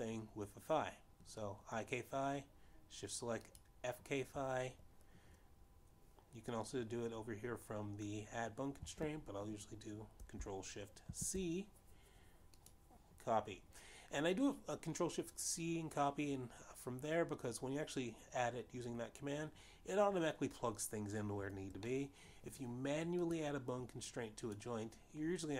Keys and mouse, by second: 1.3 click, 5.2 shift+click, 13.1 ctrl+shift+c, 14.7 click, 24.0 middle click, 25.4 click.